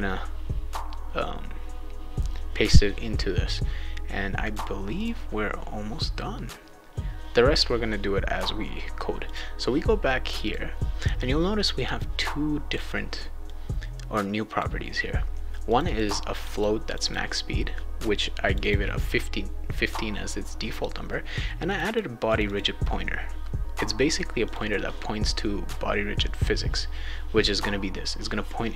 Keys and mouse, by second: 4.4 click, 5.0 click, 9.2 click, 10.2 click, 10.4 click, 12.0 click, 13.4-14.6 drag, 15.6 click, 15.8 click, 16.3 click, 16.5 click, 16.8 click, 17.0 click, 18.5 click, 18.6 click, 21.6 click, 21.8 click, 22.2 click, 22.4 click, 24.5 click.